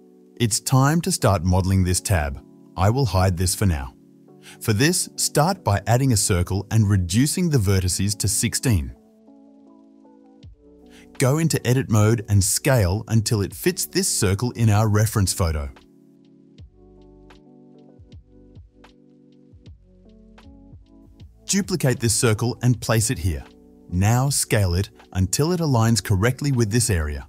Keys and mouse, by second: 3.1 click, 3.2-8.7 middle drag, 4.2 h, 6.7 shift+a, 8.8-15.9 drag, 12.5 Tab, 14.0 s, 15.9-21.0 middle drag, 16.5 s, 21.4 s, 23.0 shift+d, 25.8 s, 26.8 middle click, 27.0-27.2 drag.